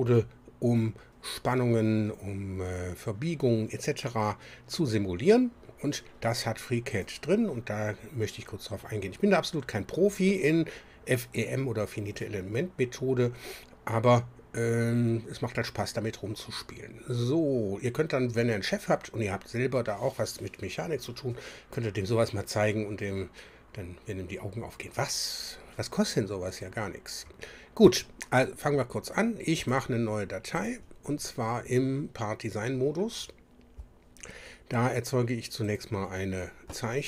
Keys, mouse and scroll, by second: 7.0 click, 29.6 click, 30.6 click, 35.7 click.